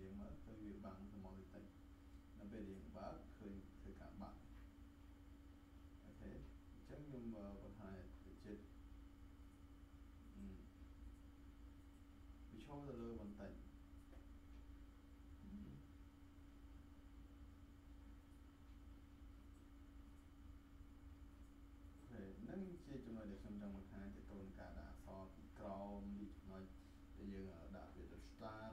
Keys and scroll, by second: 13.2 space.